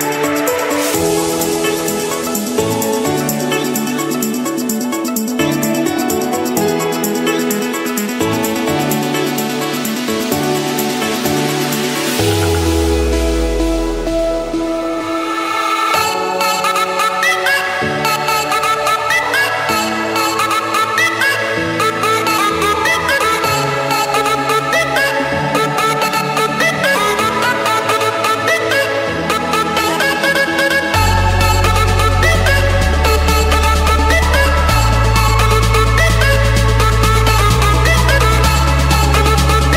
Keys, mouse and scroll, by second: 0.6 Return, 2.0-2.6 scroll down 1, 2.9 scroll up 1, 3.3 Escape, 3.9 scroll, 4.1 click, 6.1 click, 7.8 typing, 8.7 Return, 11.4-13.1 typing, 13.9 Return, 15.9-17.0 drag, 17.6 6, 19.2 Return, 21.1 Escape, 22.0-23.0 scroll down 1, 23.0 scroll down 1, 23.9-25.0 drag, 33.5 click, 35.1 click, 35.5-37.8 scroll, 38.0 click, 38.4-38.7 scroll, 38.7 Escape.